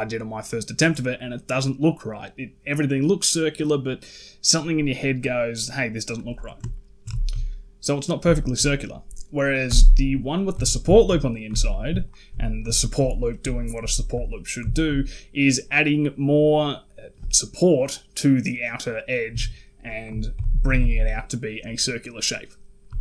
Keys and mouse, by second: 6.6 ctrl+middle drag, 7.0 shift+middle drag, 8.2 shift+middle click, 9.5 h, 10.1 click, 10.4 Tab, 10.8 shift+middle click, 11.4 alt+click, 11.8 alt+shift+click, 12.5 alt+shift+click, 12.9 shift+middle click, 13.0 shift+click, 13.4 alt+shift+click, 13.7 shift+click, 14.5 shift+click, 19.1 Tab, 20.2 alt+h, 20.5 a, 20.6 a, 22.2 click, 22.7 z.